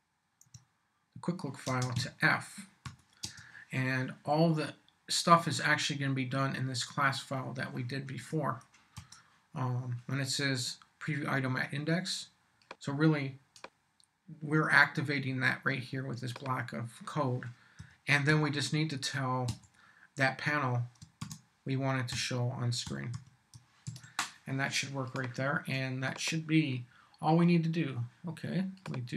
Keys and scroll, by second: 0.4 Tab, 1.6 space, 1.9 =, 2.8 f, 3.2 space, 8.2 BackSpace, 8.9 Return, 17.8 p, 18.3 v, 19.5 •, 21.2 shift+s, 22.1 shift+h, 22.8 o, 23.1 w, 23.8 super+s.